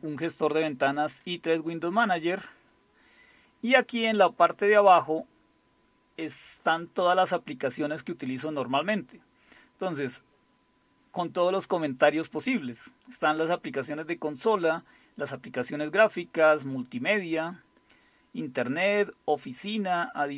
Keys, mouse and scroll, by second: 2.9-3.9 scroll down 2, 3.9-4.4 scroll down 1, 4.4-6.7 scroll down 1, 8.3-9.0 scroll down 2, 9.0-9.3 scroll down 1, 11.9-12.5 scroll down 2, 12.5-13.6 scroll down 1, 14.1-14.9 scroll down 2, 14.9 scroll down 1, 15.6-17.7 scroll down 2, 17.7-18.2 scroll down 1, 18.7-19.6 scroll down 2, 19.6-20.3 scroll down 2.